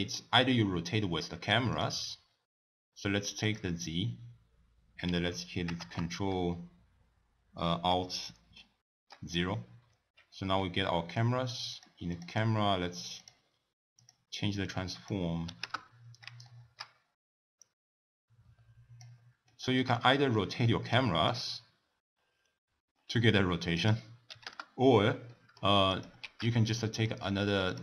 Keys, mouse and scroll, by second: 1.7 click, 3.4 click, 4.0-4.6 scroll down 1, 4.6-5.2 scroll down 1, 5.7 ctrl+alt+KP_0, 8.6-9.2 shift+middle drag, 9.2-10.6 scroll up 2, 11.7 click, 12.1 click, 13.2 click, 13.9 click, 14.6-16.4 drag, 16.4-17.6 shift+middle drag, 17.6-19.5 drag, 19.5-21.2 shift+middle drag, 21.2-25.3 drag, 25.3-25.9 middle drag, 25.9 click, 26.4 shift+d, 27.7 click.